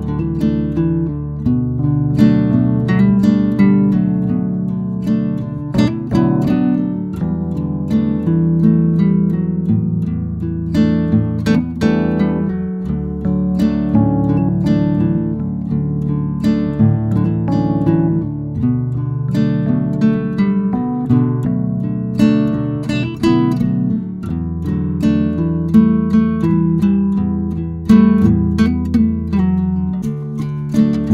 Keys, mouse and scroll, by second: 3.0 scroll up 1, 4.8 scroll down 1, 6.9 click, 10.2 scroll down 1, 10.8 scroll up 1, 12.4-22.4 drag, 22.4 scroll up 1, 23.5 click, 25.6 scroll down 1, 28.0 scroll up 1, 28.2 click, 29.2 scroll down 1, 29.8 scroll up 1.